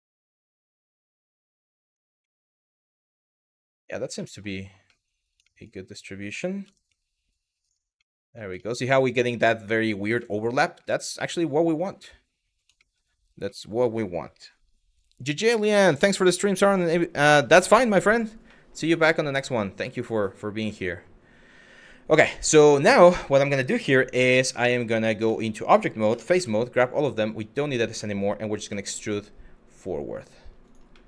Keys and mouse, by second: 0.5 g, 0.8 y, 1.5 click, 2.0 middle click, 3.1 middle click, 3.9 middle click, 4.6 middle click, 5.1 shift+middle click, 5.9 click, 6.3 g, 6.5 y, 7.2 click, 7.6 middle click, 8.3 shift+middle click, 9.8 middle click, 10.9 shift+middle click, 11.6 middle click, 12.5 shift+middle click, 13.2 middle click, 17.3 middle click, 18.1 middle click, 18.6 Tab, 19.6 middle click, 20.3 middle click, 24.2 middle click, 24.8 Tab, 25.7 3, 26.0 a, 27.1 click, 27.7 middle click, 30.3 click, 30.7 middle click.